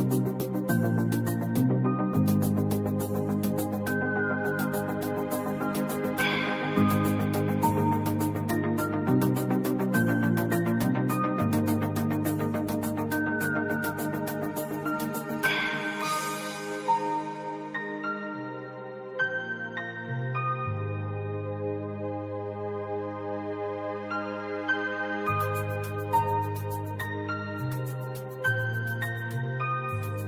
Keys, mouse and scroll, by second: 0.7 click, 4.8 right click, 7.9 click, 8.4-10.8 drag, 13.4 ctrl+2, 13.7 click, 14.5 alt+scroll down 1, 14.7 space, 14.9 click, 15.0 space, 16.3-26.4 drag, 26.4 ctrl+d.